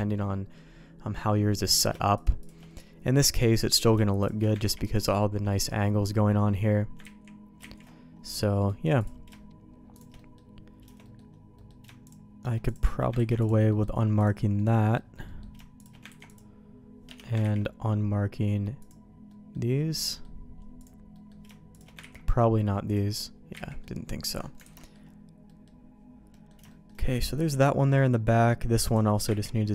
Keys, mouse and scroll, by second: 0.1 middle click, 1.7 click, 2.1 shift+click, 2.4 shift+click, 2.7 middle click, 3.3 shift+click, 3.6 middle click, 4.2 shift+click, 4.8 ctrl+e, 5.2 middle click, 5.6 middle click, 7.6 ctrl+shift+z, 8.4 middle click, 9.0 click, 9.9 shift+click, 10.1 middle click, 11.0 middle click, 11.5 middle click, 12.0 shift+click, 12.6 click, 13.1 ctrl+e, 13.7 middle click, 14.2 click, 14.6 middle click, 15.2 middle click, 15.8 click, 16.1 ctrl+e, 17.6 ctrl+e, 19.3 middle click, 20.0 middle click, 20.8 middle click, 21.7 shift+click, 22.2 ctrl+e, 23.7 ctrl+z, 23.7 middle click, 24.2 middle click, 24.6 alt+a, 24.8 middle click, 25.4 middle click, 26.3 middle click, 26.7 middle click, 27.8 middle click, 28.8 click, 29.5 ctrl+e.